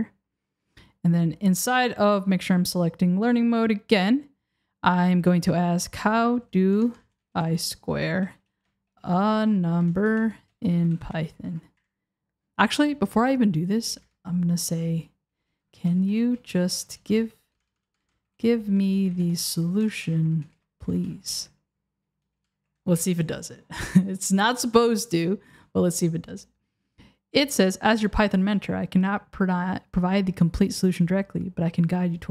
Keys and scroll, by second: 6.8 BackSpace, 13.6 super+a, 14.0 BackSpace, 17.6 BackSpace, 19.8 BackSpace, 22.3 BackSpace, 23.0 Return.